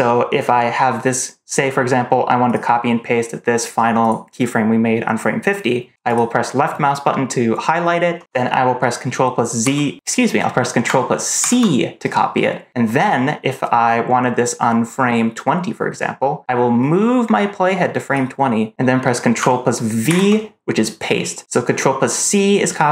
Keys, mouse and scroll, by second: 2.4 click, 3.9 click, 6.0 click, 9.5 ctrl+c, 11.3 ctrl+c, 16.7-18.0 drag, 20.0 ctrl+v.